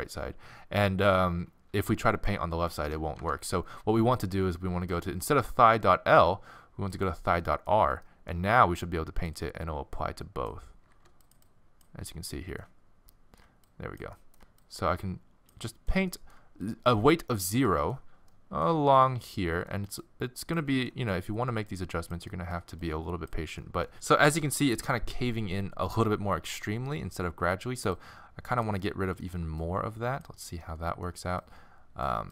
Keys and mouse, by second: 3.2 Tab, 6.9 right click, 7.4-8.7 middle drag, 9.3-10.9 middle drag, 10.9 f, 12.3-13.3 middle drag, 13.7-15.7 middle drag, 16.1-20.9 middle drag, 21.1 middle click, 23.4-23.9 middle drag, 28.0-28.8 drag, 28.8-32.3 middle drag.